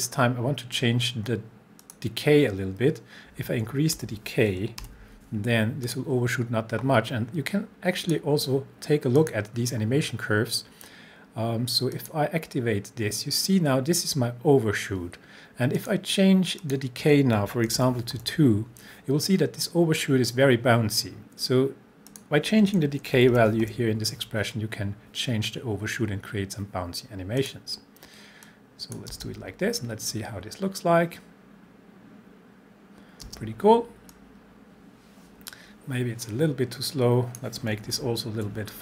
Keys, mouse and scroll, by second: 1.8 click, 4.8 7, 5.9 click, 8.1 click, 11.9 click, 15.8 click, 17.8 2, 22.1 click, 23.3 7, 27.4 click, 29.1 space, 33.2 space, 34.1-37.6 drag, 37.9 shift+Page_Down.